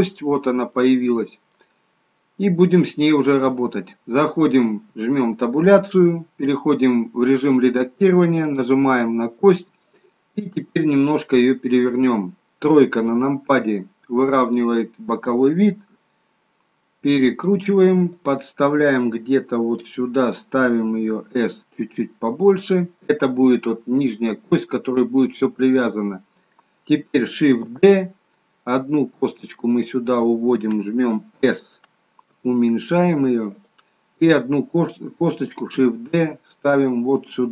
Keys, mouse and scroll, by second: 0.8 middle click, 1.8-2.4 scroll up 1, 2.4-3.6 scroll down 1, 5.8 Tab, 8.6 click, 12.8 KP_3, 15.5 click, 21.3 s, 23.9 click, 27.5 shift+d, 32.3 s, 35.7 shift+d.